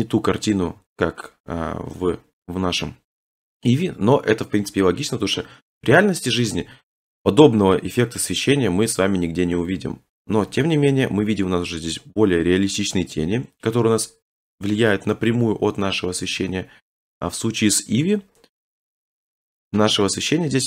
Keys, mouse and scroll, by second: 6.4 Left, 10.3 Right, 11.4-12.1 scroll, 12.1 middle click, 12.3 middle click, 12.5 middle click, 13.9 middle click, 14.1 middle click, 14.3 middle click, 14.4 middle click, 14.5 middle click, 15.3 middle click, 15.5 middle click, 16.2 Left, 20.1-20.5 scroll.